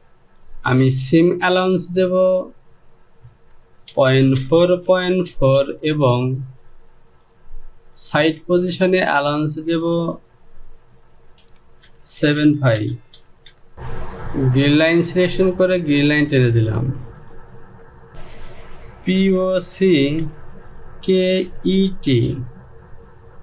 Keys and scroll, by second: 3.9 Down, 4.4 KP_Decimal, 4.9 KP_4, 5.1 Down, 5.3 KP_Decimal, 5.8 KP_4, 6.1 Down, 10.1 Down, 11.9-13.7 typing, 13.0 Down, 20.5 o, 20.5 c, 21.4 k, 22.6 typing.